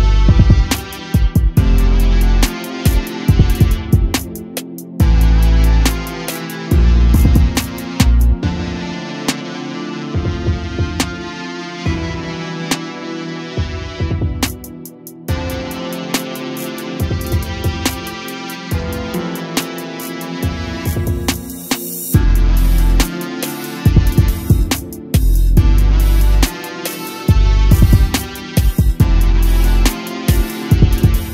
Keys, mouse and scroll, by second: 1.1 click, 2.2 click, 3.4 click, 4.2-4.6 scroll up 1, 5.4-7.5 drag, 7.5 BackSpace, 11.1-11.7 shift+middle drag, 11.7 click, 12.3-13.8 scroll down 1, 13.8 click, 19.7 click, 23.7 a, 23.9 a, 25.6 click, 28.1 click, 29.4 click.